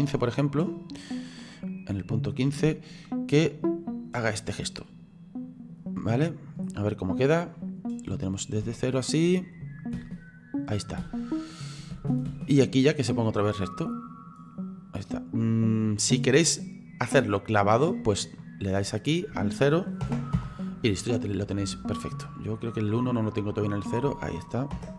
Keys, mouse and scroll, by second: 8.1-10.0 middle drag, 10.0 space, 11.0 space, 11.9 space, 12.3 space, 12.8 click, 16.0 click, 19.2 click.